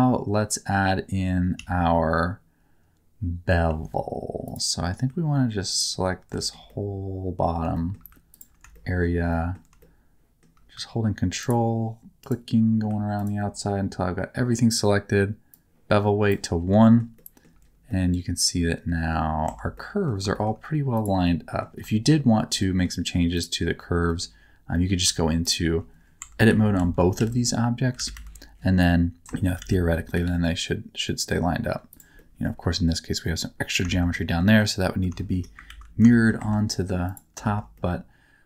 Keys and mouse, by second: 1.6 1, 3.7 2, 6.4 middle click, 6.7 middle click, 7.7 shift+middle click, 8.7 shift+middle click, 9.3 middle click, 9.8 shift+middle click, 11.4 ctrl+click, 13.2 ctrl+click, 15.6 click, 16.8 shift+middle click, 17.2 shift+middle click, 17.9-19.1 middle drag, 19.5 Tab, 19.7 middle click, 20.3 shift+middle click, 20.9 click, 21.2 middle click, 22.6 middle click, 24.1 shift+middle click, 24.7 middle click, 25.4 shift+middle click, 26.2 Tab, 26.5 KP_7, 26.8 alt+z, 27.2 1, 28.0 alt+a, 28.1 c, 29.3 shift+middle click, 29.6 alt+z, 29.7 middle click, 30.2 g, 30.2 middle click, 31.9 click, 32.2 middle click, 33.9 shift+middle click, 34.1 middle click, 35.2 shift+middle click, 35.7 ctrl+z, 36.1 shift+middle click, 36.4 Tab, 37.4 shift+middle click, 37.7-38.4 middle drag.